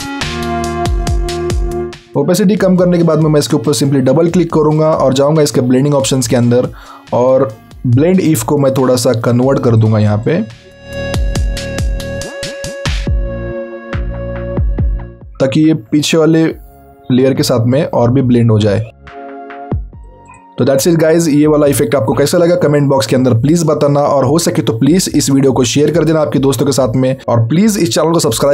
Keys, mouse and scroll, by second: 1.5-2.8 alt+scroll up 2, 3.5 click, 10.6 click, 12.4 alt+click.